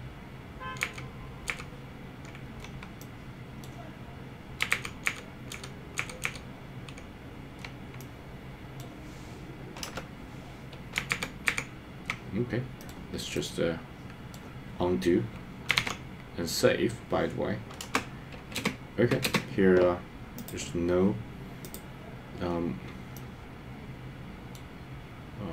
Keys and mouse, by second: 0.8 super+z, 1.5 super+z, 3.0 middle click, 4.8 super+z, 5.2 super+z, 5.5 super+z, 6.0 super+z, 6.2 super+z, 8.0 middle click, 9.9 KP_0, 11.1 super+z, 11.5 super+z, 12.8 middle click, 13.3-14.3 middle drag, 16.1 super+s, 17.9 KP_0, 18.7 space, 19.4 space, 23.1-24.6 middle drag.